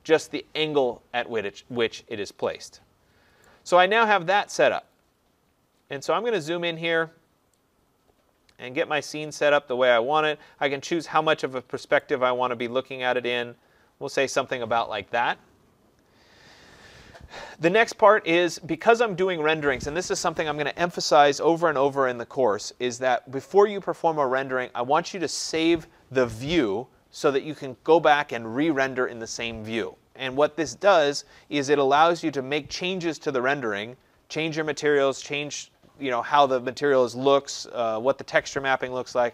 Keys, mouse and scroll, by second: 3.4 right click, 3.7-4.4 scroll, 5.1-6.1 scroll, 6.1-8.2 scroll, 12.0 right click, 12.3 middle click, 12.3 middle click, 12.7 middle click, 12.9 middle click.